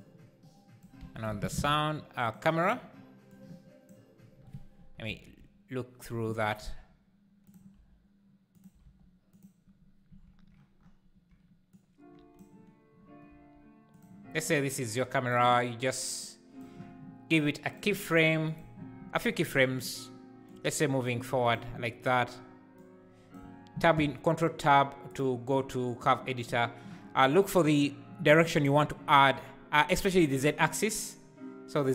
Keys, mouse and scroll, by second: 0.0 click, 1.0 x, 1.4 shift+a, 3.3 click, 5.1 ctrl+KP_0, 6.6 r, 7.7 r, 11.7 click, 13.3 r, 15.0 click, 18.3 g, 19.5 shift+right click, 20.5 click, 21.3 g, 25.1-31.9 drag.